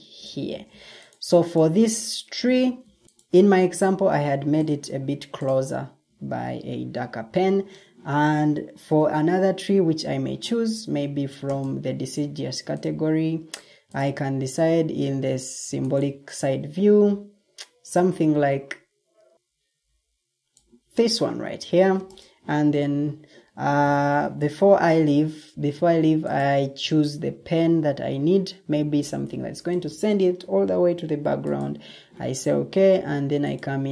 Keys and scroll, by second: 0.4 ctrl+d, 3.0 ctrl+t, 6.0 Escape, 8.7 ctrl+t, 24.0 ctrl+t, 24.1 ctrl+g.